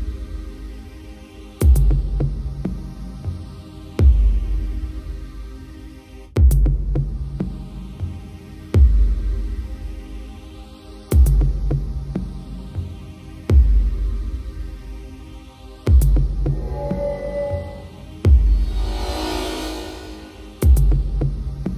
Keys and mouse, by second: 0.9 right click, 1.2 right click, 1.6 right click, 2.8 right click, 3.1 right click, 3.4 right click, 4.8 right click, 5.5 right click, 7.1 right click, 7.9 right click, 8.3 right click, 10.7 right click, 11.4 right click, 12.2 right click, 12.5 right click, 12.8 right click, 15.4 right click, 16.9 right click, 17.3 right click, 18.2 right click, 19.2 right click, 19.5 right click, 20.6 right click, 21.4 right click.